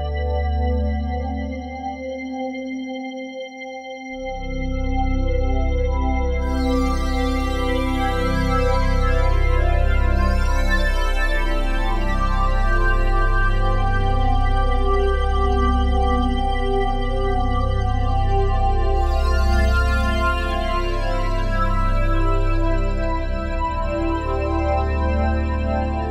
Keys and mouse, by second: 0.0-0.8 typing, 2.1-3.4 drag, 3.6 ctrl+alt+click, 5.7 alt+click, 6.1-7.6 drag, 7.6 typing, 8.1-11.0 ctrl+alt+drag, 11.0-12.9 typing, 14.2 click, 15.7 shift+d, 16.8 click, 18.2 shift+d, 19.6 click, 20.1-24.5 drag, 20.1 1, 24.5 g, 24.9 x, 25.8 click.